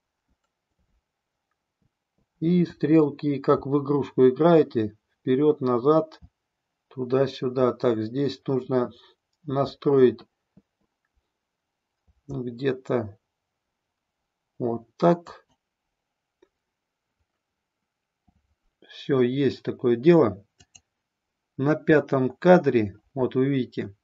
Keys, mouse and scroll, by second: 0.3 Up, 0.9-2.4 Left, 2.4-3.5 Down, 3.5 Left, 4.0-6.2 Left, 7.6-9.5 Up, 11.2-11.9 Down, 11.9 Left, 15.1 click, 20.5 click.